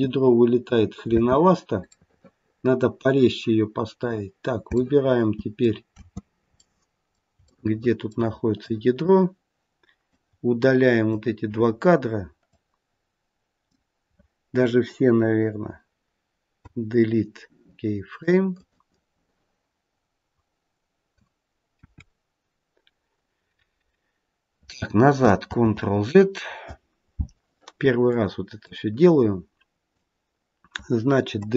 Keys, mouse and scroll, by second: 1.0 space, 1.9 middle click, 3.9-4.6 scroll down 1, 4.6 scroll down 2, 4.6 space, 4.8 middle click, 5.0 middle click, 5.9 space, 6.5 middle click, 7.5 shift+middle click, 8.5 click, 10.1 click, 12.5 click, 16.5 Delete, 21.6 KP_1, 25.4 ctrl+z, 28.0 click, 28.7 click, 31.2 Delete.